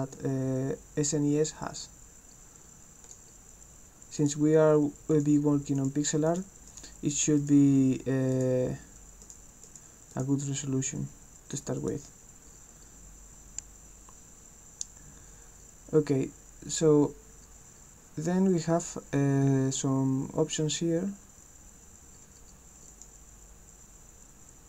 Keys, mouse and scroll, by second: 3.0 click, 4.2 click, 5.1 click, 5.8 click, 6.3 click, 6.7 click, 7.4 click, 8.3 click, 9.2 click, 9.7 click, 10.1 click, 11.0-11.8 scroll down 2, 11.8 click, 22.9 click.